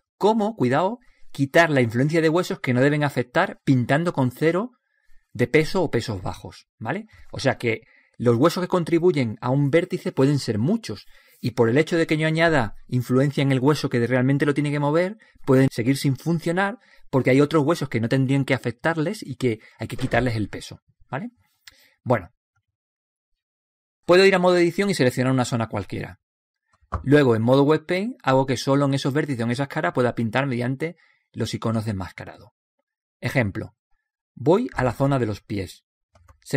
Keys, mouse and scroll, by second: 3.8-7.1 right drag, 28.1 click, 35.7 click.